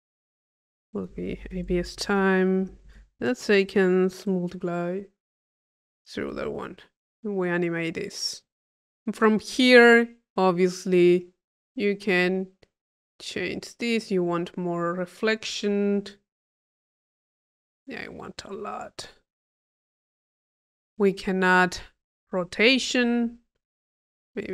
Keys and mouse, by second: 0.7 click, 8.1 click, 9.0 click, 10.3 click, 11.5 click, 12.4-15.7 drag, 16.2-18.6 drag, 20.7 click, 21.4 click, 21.5 click, 23.9-24.5 middle drag.